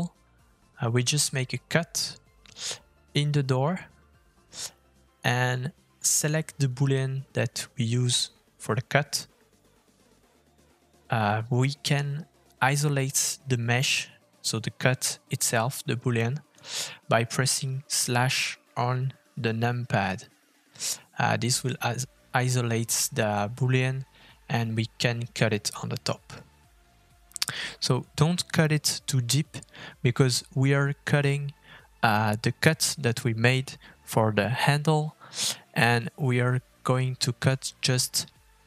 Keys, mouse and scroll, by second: 0.4 shift+middle click, 0.4 shift+scroll up 1, 0.7 click, 1.3 f, 3.9 middle click, 10.1 middle click, 10.5-12.1 scroll up 1, 14.1 click, 14.9 shift+middle click, 15.1-15.5 scroll up 3, 15.5 middle click, 17.8 middle click, 20.7 KP_Divide, 24.9 middle click.